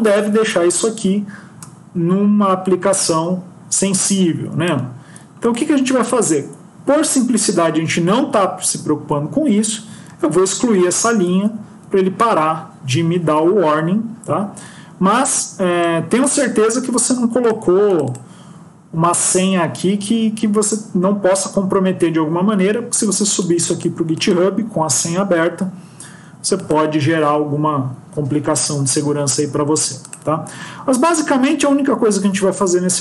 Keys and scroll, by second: 10.0 ctrl+x, 11.2 ctrl+s.